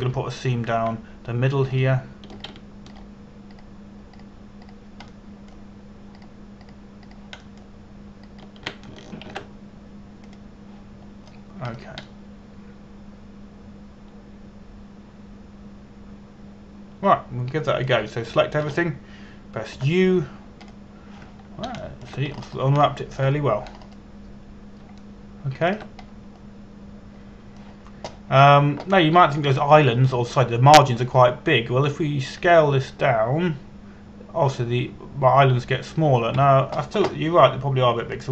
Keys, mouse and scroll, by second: 0.0-1.1 scroll down 1, 1.1 a, 1.6 right click, 3.3 shift+right click, 4.0 right click, 4.6 right click, 5.2 right click, 5.8 right click, 6.3 right click, 6.8 shift+middle click, 7.8 right click, 8.3 right click, 8.7 shift+right click, 9.1 shift+middle click, 10.0 shift+right click, 10.9 ctrl+e, 11.9 click, 12.7-13.7 scroll down 1, 13.7 middle click, 19.9 a, 20.3 a, 21.4 u, 22.3 click, 23.5 shift+middle click, 24.0-24.4 scroll up 1, 24.5 shift+middle click, 25.4-26.5 scroll up 1, 26.6 shift+middle click, 27.8-33.2 scroll down 1, 34.0 s, 38.1 Escape.